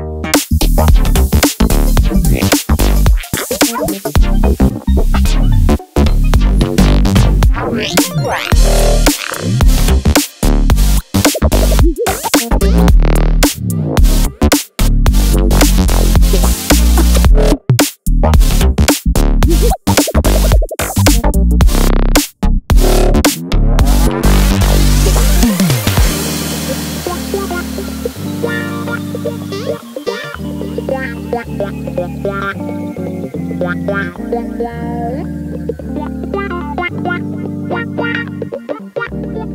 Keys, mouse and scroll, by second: 5.3 e, 7.8 click, 8.3-9.4 middle drag, 11.0 Delete, 13.0-15.5 drag, 15.8 click, 16.8-19.1 middle drag, 19.8 click, 22.3 click, 23.0 middle click, 28.8 g.